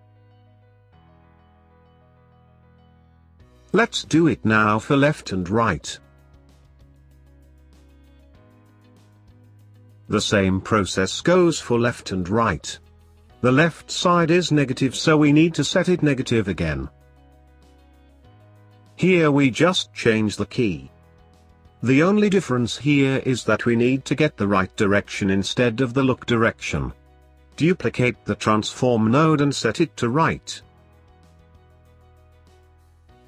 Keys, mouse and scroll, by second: 6.1-8.2 middle drag, 8.2-9.2 scroll down 3, 9.2 click, 12.8-13.6 scroll up 2, 13.6 click, 14.3-14.9 scroll down 1, 14.9 click, 15.8 shift+d, 17.9 scroll up 2, 18.1 middle click, 18.9 click, 19.3-19.8 scroll up 1, 19.8-21.3 drag, 21.3 scroll down 1, 21.4-23.8 middle drag, 23.8 click, 24.8 middle click, 25.4 shift+d, 27.4-28.9 drag, 28.9-29.6 scroll up 4, 29.6 middle click, 30.0 click, 31.9 scroll down 1, 32.1-33.2 middle drag.